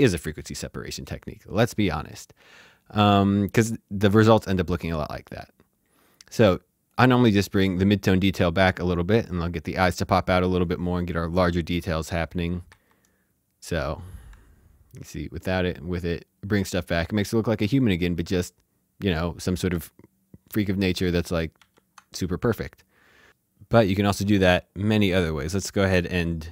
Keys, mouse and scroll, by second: 6.9 h, 7.1 click, 12.3 click, 12.7 shift+z, 14.2 shift+z, 14.9 ctrl+d, 15.6 ctrl+d, 20.9 ctrl+d, 21.5 typing, 22.8 typing, 23.3 shift+Num_Lock, 24.9 click.